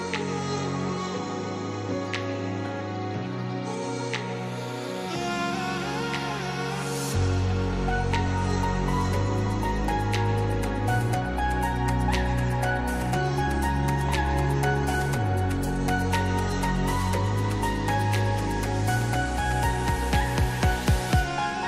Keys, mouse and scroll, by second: 0.5 click, 0.7 scroll down 1, 1.2 click, 2.0 click, 2.9 scroll up 1, 3.0 scroll down 1, 3.2-3.7 scroll up 1, 3.8 click, 4.8-6.0 drag, 6.0 alt+Tab, 11.9-13.2 drag.